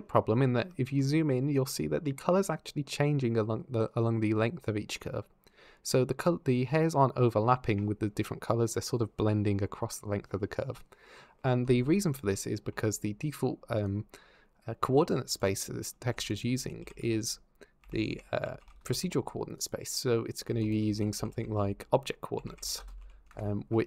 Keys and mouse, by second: 0.6 shift+middle click, 13.7 drag, 15.0 Escape, 15.9 shift+a, 20.3 shift+a.